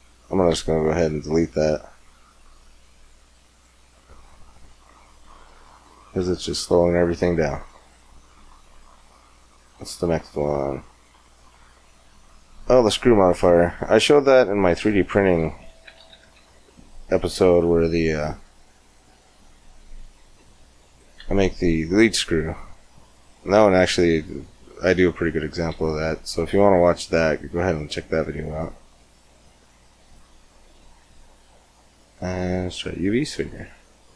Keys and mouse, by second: 3.8 Tab, 3.8 x, 6.0 shift+a, 9.5-11.5 drag, 20.7-22.6 drag, 21.0 x, 25.5 shift+a, 33.8-34.1 drag.